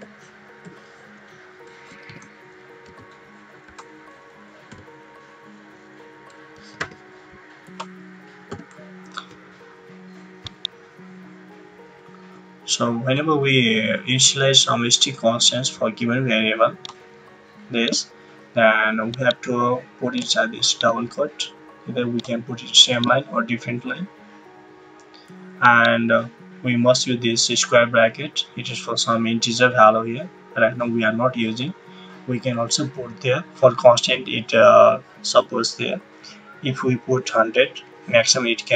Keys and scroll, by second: 0.0-0.6 typing, 2.0-2.8 typing, 3.6 Right, 6.2-7.2 typing, 7.6 Right, 36.9-38.2 typing.